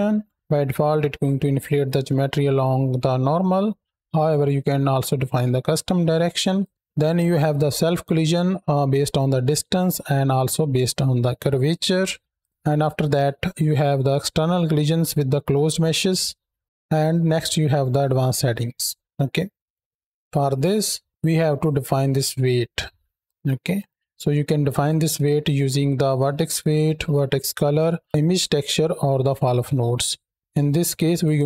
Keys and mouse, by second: 6.4 click, 12.2 click, 19.4 click, 19.6 middle click, 20.2-20.8 middle drag, 21.4-23.1 drag, 23.9 middle click, 29.8-30.2 middle drag, 30.7-31.0 drag, 31.2-31.4 drag.